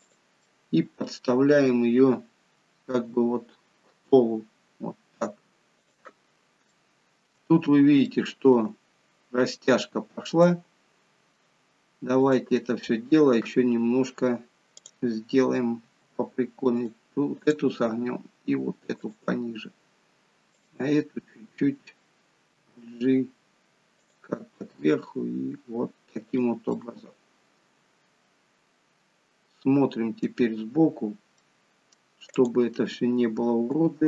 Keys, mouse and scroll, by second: 0.5 middle click, 1.1-1.6 scroll down 2, 3.0-3.4 scroll down 1, 3.0 g, 6.3-6.7 scroll up 2, 6.7 shift+middle click, 7.6-9.7 scroll up 3, 8.1 shift+middle click, 10.1-10.5 scroll down 1, 10.5 middle click, 12.2 click, 14.8 click, 15.9 r, 17.4 click, 18.0 r, 20.6 click, 22.6 g, 24.8 r, 26.7 middle click, 31.5 middle click, 32.4 click, 33.8 g.